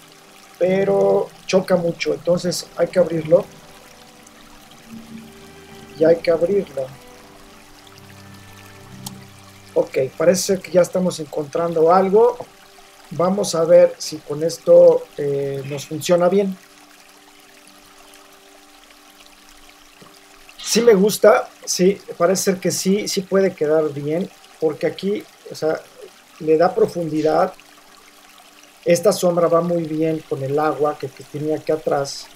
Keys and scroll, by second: 9.1 Return.